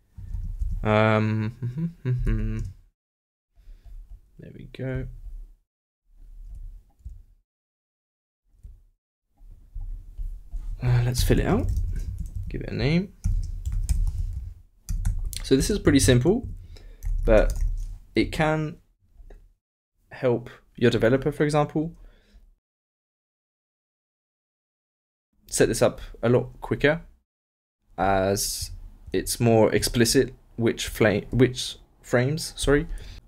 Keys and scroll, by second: 11.2 shift+[, 11.5 shift+Return, 11.7 shift+Return, 11.8 shift+], 12.0 shift+Left, 12.8 shift+Left, 13.2-15.8 typing, 16.4 shift+Left, 30.3 alt+n.